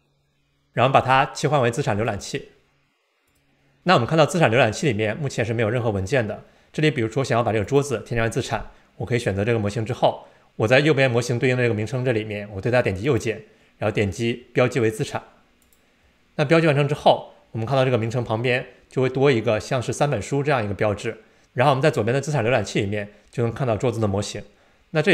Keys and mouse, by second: 0.0 click, 2.2-3.5 drag, 13.0-15.9 right drag.